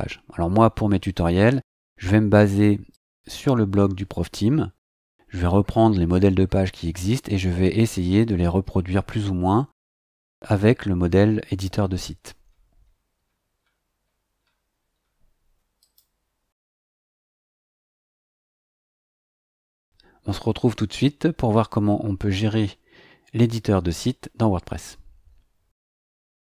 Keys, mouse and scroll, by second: 2.9 click, 5.3-10.8 scroll down 14, 11.7-12.1 scroll down 2, 12.4-15.2 scroll up 12, 15.8 click, 17.6 click.